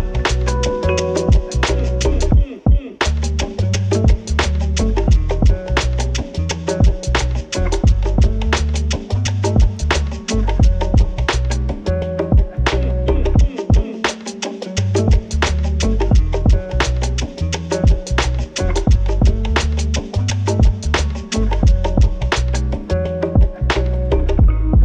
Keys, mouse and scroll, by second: 8.8 click, 12.2 click, 16.8-18.4 typing, 17.8 Return, 18.9 click, 19.5-22.5 typing, 22.7 Return, 24.0 click, 24.2 click, 24.6-24.8 typing.